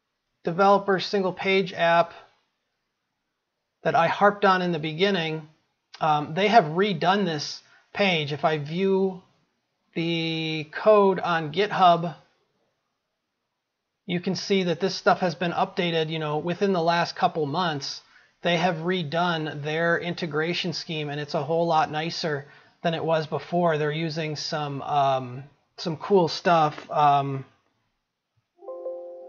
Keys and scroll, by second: 28.1 ctrl+f.